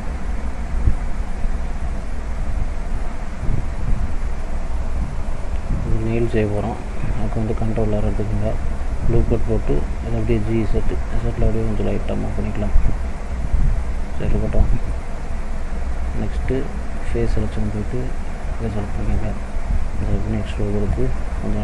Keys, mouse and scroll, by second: 1.2-2.0 shift+scroll down 3, 1.6 middle click, 2.6 e, 4.4 middle click, 5.8 scroll up 1, 6.4 middle click, 7.6 ctrl+r, 14.2 click, 14.6 middle click, 15.0-17.2 scroll up 1, 17.8 click, 19.1 click, 20.1 e, 21.5 s.